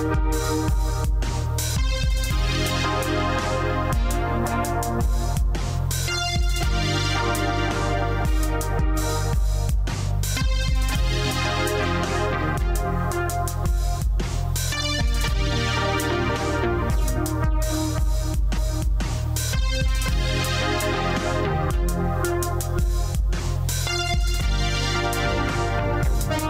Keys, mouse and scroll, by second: 1.2 z, 1.8-4.3 scroll up 1, 4.3 right click, 9.5 middle click, 10.2 q, 14.9 q, 15.4 click, 16.1 q, 16.8 click, 17.6 click, 18.3 q, 18.9 click, 23.6 click.